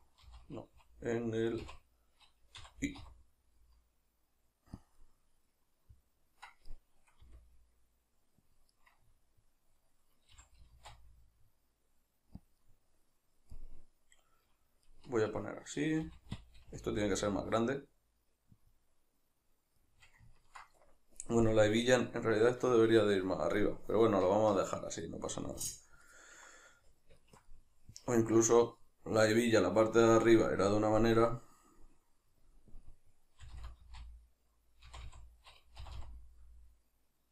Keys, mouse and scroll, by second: 4.9 click, 5.0-8.6 middle drag, 7.2 r, 8.6 click, 8.8-12.5 middle drag, 10.4 g, 12.5 click, 12.6-16.5 middle drag, 16.0 g, 16.5 click, 16.7 s, 18.7 click, 19.8-37.3 middle drag, 33.4 r.